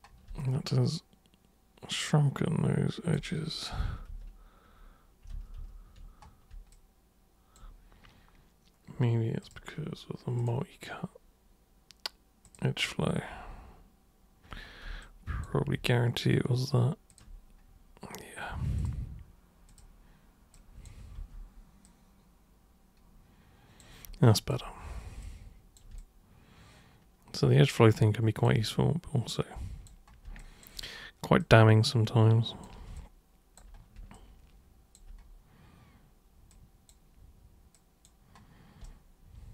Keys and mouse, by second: 0.4-3.1 alt+super+drag, 3.8 z, 4.1 z, 5.3 z, 5.6 z, 6.7 alt+super+click, 9.4 super+click, 10.4 super+click, 12.4 super+click, 15.0 alt+super+click, 17.1 ctrl+super+click, 18.7 super+click, 19.7 super+click, 20.5 click, 21.2 w, 21.8-23.8 drag, 24.2 alt+click, 25.2 click, 26.0-28.4 alt+drag, 29.3 super+click, 30.4 alt+super+click, 31.4 super+click, 32.9 alt+super+click, 34.1 alt+super+click, 36.5 super+click, 37.7 super+click, 38.8 super+right click.